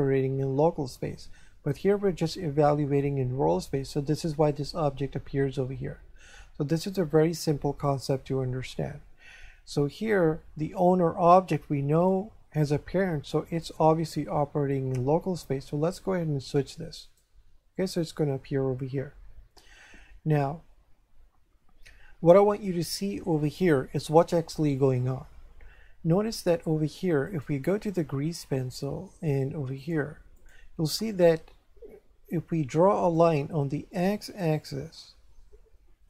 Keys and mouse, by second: 13.5 click, 16.6 click, 27.3 click, 29.8 click, 33.1 click.